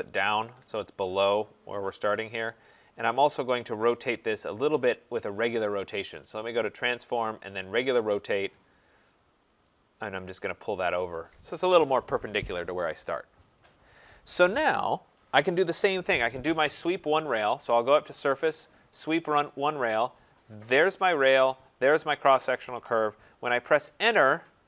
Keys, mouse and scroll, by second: 0.3 shift+click, 2.8 right click, 3.1-3.7 scroll, 3.7-4.6 scroll down 5, 5.7-6.4 scroll, 6.4 click, 7.6 click, 8.7 click, 9.6 click, 10.8 click, 11.6 Escape, 11.8 Escape, 14.5 right click, 15.2-15.8 scroll, 17.7 click, 19.0 click, 20.8 click, 21.8 click, 23.8 Return.